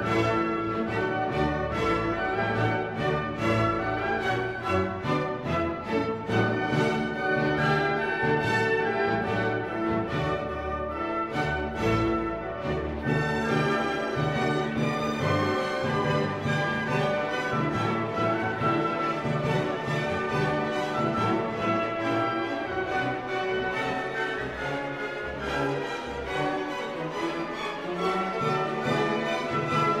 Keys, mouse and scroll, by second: 2.1-5.4 drag, 5.4-7.2 drag, 7.2-9.2 drag, 9.2-13.3 drag, 13.3-18.8 drag, 20.8-27.2 drag, 27.2-30.0 middle drag.